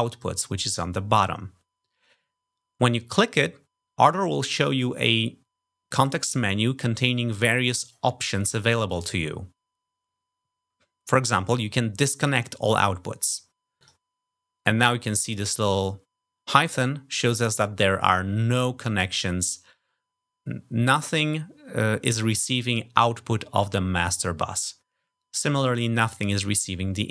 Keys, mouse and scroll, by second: 0.0 click, 13.7 click.